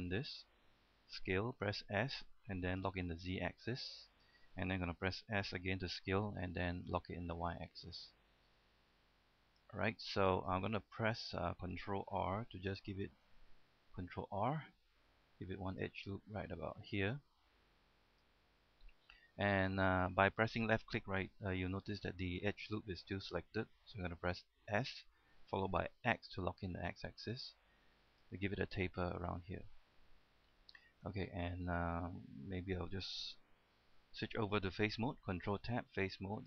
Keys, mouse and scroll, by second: 2.0-3.0 typing, 4.3 click, 5.5-6.5 typing, 7.6 click, 8.0-8.5 scroll down 1, 9.7 click, 10.2-10.8 scroll up 1, 10.8 middle click, 12.7 ctrl+r, 13.3 right click, 14.4 ctrl+r, 15.9 click, 18.6 middle click, 21.6 shift+middle click, 25.1 s, 27.5 typing, 28.3 click, 28.6-28.9 scroll down 1, 28.9 middle click, 29.8-30.3 scroll up 1, 30.5 shift+middle click, 31.5 shift+middle click, 32.4 shift+middle click.